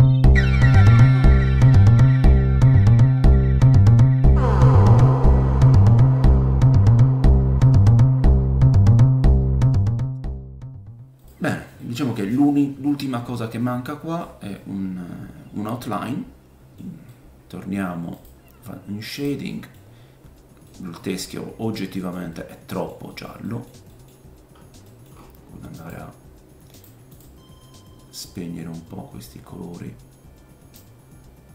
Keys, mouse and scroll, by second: 0.0-1.1 typing, 0.2-1.6 middle drag, 0.4 click, 0.4 right click, 1.3 scroll up 1, 1.6-2.6 drag, 2.4 scroll up 1, 2.6 middle click, 2.7 scroll down 1, 3.0 click, 3.0 g, 3.1 middle click, 3.4 click, 3.4 scroll up 1, 3.6 g, 3.7-5.0 middle drag, 3.9-5.3 drag, 3.9-5.0 right drag, 4.0 scroll up 3, 4.8 scroll down 3, 5.1 middle click, 5.1 right click, 5.4 scroll up 4, 5.6-8.6 drag, 6.3 middle click, 6.5 scroll up 1, 7.5 middle click, 7.6 scroll down 3, 8.0 middle click, 8.1 right click, 8.2 KP_0, 8.7 click, 8.7 g, 8.8 middle click, 9.3 g, 9.3 click, 9.4 middle click, 9.8 click, 9.8 right click, 9.9 scroll up 3, 10.3 click, 11.2 middle click, 11.3-14.2 drag, 11.8 middle click, 14.2-18.3 middle drag, 14.2-18.3 right drag, 17.3 scroll up 1, 18.3 click, 19.1-21.2 middle drag, 19.1-21.2 right drag, 20.1-20.6 scroll down 1, 21.1-22.0 scroll down 6, 21.2-25.3 drag, 22.0 middle click, 22.3 middle click, 23.1 middle click, 23.4 middle click, 23.9 middle click, 24.3-25.8 scroll up 8, 25.3 middle click, 25.3 click, 25.8 middle click, 25.9-31.5 drag.